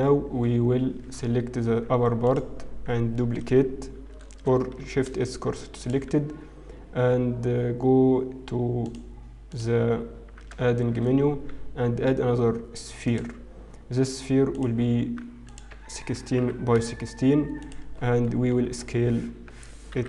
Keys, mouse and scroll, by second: 0.2-1.7 scroll up 2, 1.7 Tab, 2.2 alt+click, 5.2 shift+s, 7.1 Tab, 8.8 click, 10.7 shift+a, 17.5 click.